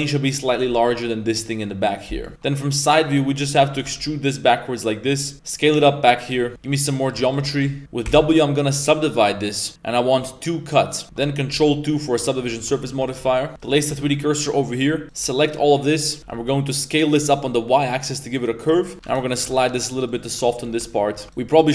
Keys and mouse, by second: 0.3 s, 0.7 z, 1.4 middle click, 2.1 middle click, 2.3 ctrl+z, 3.1 g, 5.1 g, 5.3 s, 6.5 ctrl+r, 7.8 a, 8.0 w, 11.0 Tab, 11.5 ctrl+2, 12.5 shift+middle click, 12.8 Tab, 13.2 z, 13.5 Tab, 13.5 3, 13.6 right click, 14.0 shift+s, 14.6 ctrl+right click, 15.0 right click, 15.4 ctrl+right click, 16.2 s, 18.9 g, 20.6 Tab, 20.6 g, 21.2 Tab, 21.2 alt+shift+2.